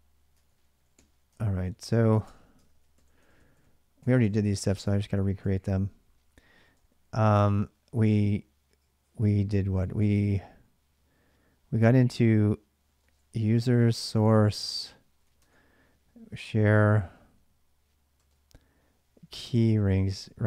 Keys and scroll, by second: 0.0-5.1 typing, 2.4 ctrl+[, 2.4 ctrl+j, 5.2 ctrl+a, 6.1-6.9 typing, 12.4-19.7 typing, 13.9 Tab, 14.3 Tab, 16.1 Return, 20.0 Return.